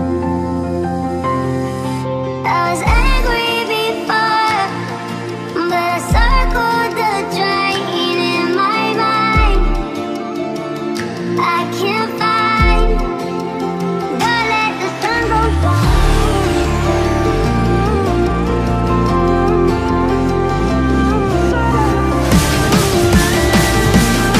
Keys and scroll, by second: 1.0 Right, 3.3 Right, 4.1 Left, 7.0 Left, 8.4 Right, 13.2 Right, 15.1 Left.